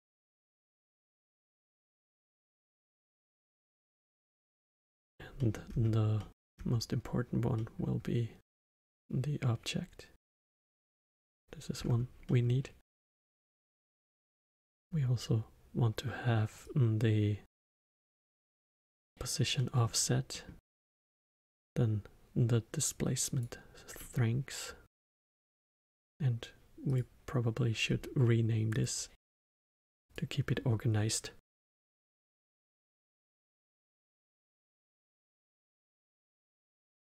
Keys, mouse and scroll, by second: 0.9-2.0 scroll up 1, 2.0-2.6 scroll up 1, 2.6-3.4 scroll up 1, 3.4-4.8 middle drag, 4.8-5.3 scroll down 2, 5.3 middle click, 5.7-6.1 scroll down 2, 6.1 middle click, 6.6-7.5 scroll down 1, 7.5-8.9 middle drag, 8.9-11.8 drag, 11.8-12.2 scroll up 4, 12.2-12.9 middle drag, 12.9-13.6 scroll up 3, 13.6 middle click, 14.2-14.7 scroll down 2, 14.7-16.6 scroll up 2, 16.6-19.5 drag, 19.5-21.6 middle drag, 21.6-23.9 drag, 23.9-24.9 middle drag, 24.9 click, 26.8 click, 27.8 scroll down 1, 28.7 click, 29.9-33.0 drag, 34.8 f.